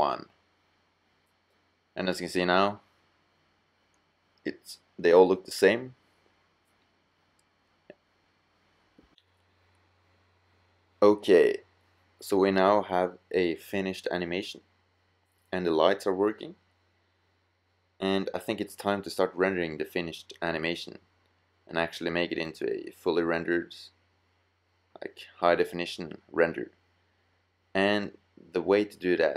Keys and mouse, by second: 0.0-2.0 middle drag, 3.3-3.9 middle drag, 4.5-5.7 drag, 8.2-9.9 drag, 16.7-18.2 drag, 18.4 click, 26.5 middle click.